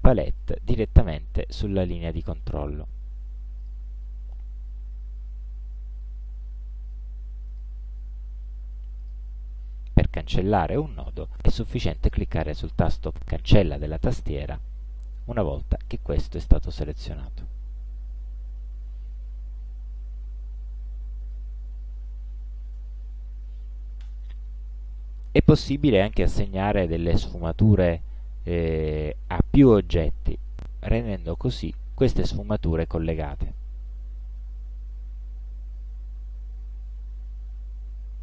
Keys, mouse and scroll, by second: 3.7 click, 5.3 ctrl+z, 7.5 click, 9.0 click, 11.8 click, 17.0 Delete, 20.7 click, 22.8 space, 24.1 space, 25.3 shift+click, 33.5 click, 34.7-38.2 drag.